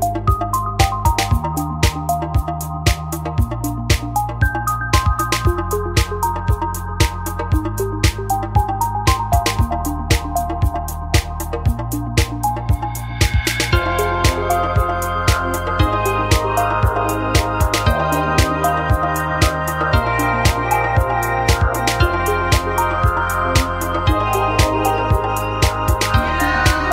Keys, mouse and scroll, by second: 2.6 click, 5.3 click, 6.9-8.0 drag, 8.0 ctrl+z, 8.6 ctrl+shift+z, 11.6 click, 20.0-21.4 drag, 26.1-26.9 middle drag.